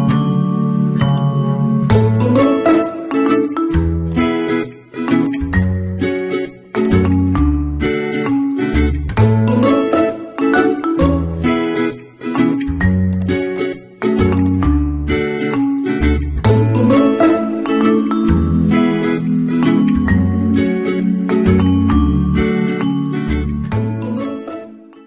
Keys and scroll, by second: 11.8 ctrl+h.